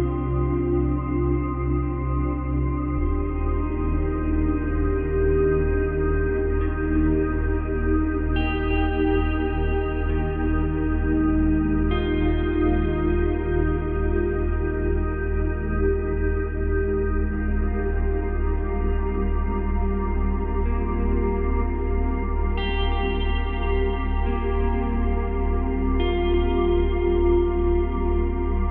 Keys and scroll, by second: 2.3 space, 3.8 space, 9.1 space, 10.6 space, 18.9 space, 20.5 space, 26.2 space, 27.2 space.